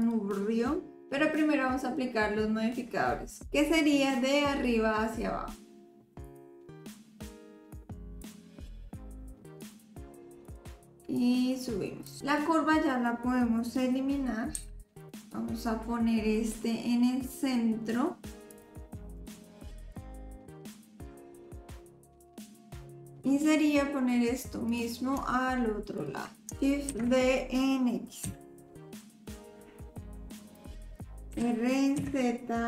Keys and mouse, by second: 0.0 click, 6.2-8.2 drag, 9.6-10.5 drag, 11.2 click, 14.5 x, 15.3-18.6 drag, 19.2 click, 19.4 s, 19.7 click, 19.9 r, 20.4 r, 21.1 click, 21.3 click, 21.8 middle click, 22.0 click, 22.2 s, 22.5 click, 22.9 click, 23.1 middle click, 24.6 click, 26.9 shift+d, 31.3 r.